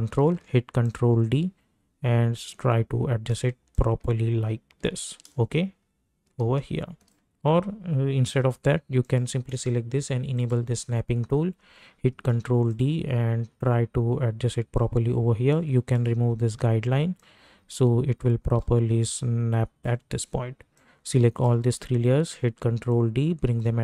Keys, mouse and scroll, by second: 0.2 ctrl+d, 1.1-3.3 ctrl+drag, 4.0 ctrl+click, 5.3 ctrl+shift+click, 12.1 ctrl+d, 12.7-19.0 drag, 19.0-22.1 drag, 22.1 ctrl+d, 22.9-23.8 drag.